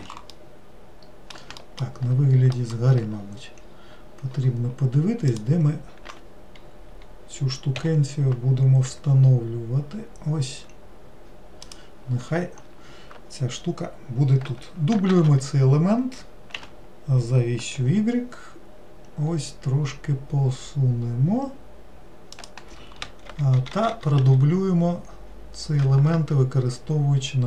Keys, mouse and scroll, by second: 0.4-1.7 middle drag, 2.6 alt+middle click, 3.2-3.6 scroll down 3, 5.3 click, 15.2 shift+d, 23.3 shift+r, 23.6 shift+r.